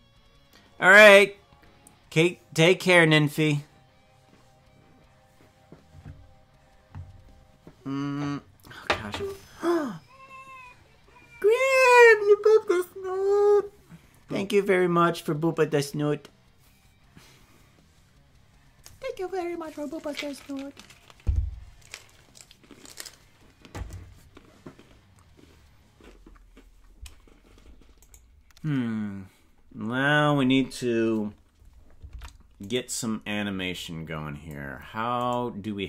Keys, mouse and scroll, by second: 28.0 right click, 32.1 ctrl+Tab, 32.7 right click, 33.7 click, 35.4 right click.